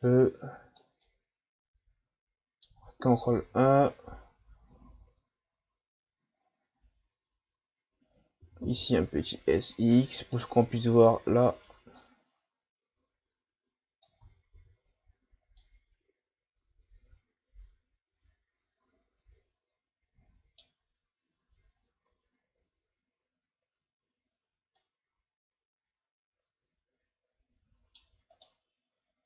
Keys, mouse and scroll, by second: 1.0-3.3 middle drag, 3.3 ctrl+KP_1, 8.4 s, 12.0-14.2 drag, 14.2 Tab, 14.5 a, 14.9-15.5 scroll down 3, 15.6-21.0 middle drag, 21.0-21.8 scroll up 2, 21.8-22.5 shift+scroll up 2, 24.7 scroll up 1, 24.8-27.8 middle drag, 28.3 right click.